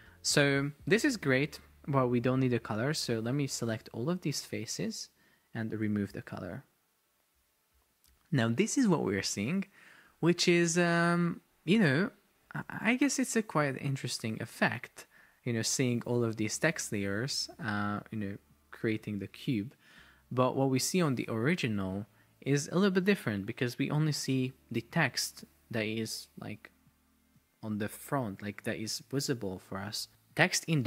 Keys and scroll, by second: 10.5 shift+Down, 11.5 shift+Up, 12.9 shift+Down, 13.6 shift+Up, 16.0 shift+Down, 16.7 shift+Up, 19.2 shift+Down, 21.8 super+Tab, 30.4 super+Tab.